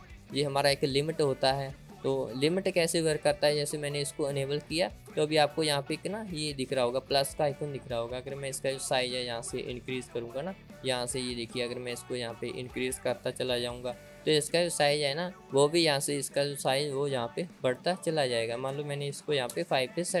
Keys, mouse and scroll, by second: 0.0-4.1 drag, 5.3 click, 13.7-20.2 drag.